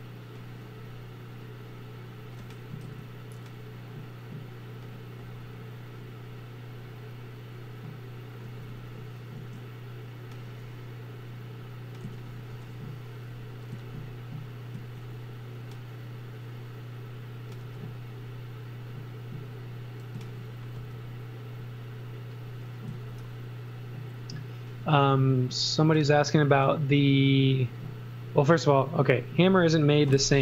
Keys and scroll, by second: 2.9 super+z, 8.7 x, 9.4 a, 10.4 a, 12.0 z, 12.5 x, 13.7 z, 17.7 space, 20.2 z, 20.8 space, 22.9 z, 24.8 x, 26.5 space.